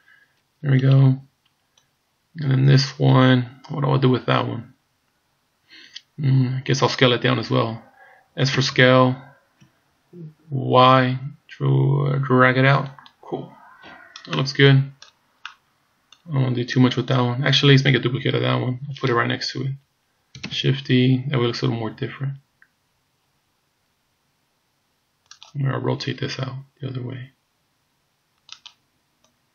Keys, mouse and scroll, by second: 0.8 right click, 1.8 click, 8.6 s, 14.4 middle click, 15.5 middle click, 16.8 click, 19.4 KP_3, 20.5 shift+d, 26.0 r, 29.3 click.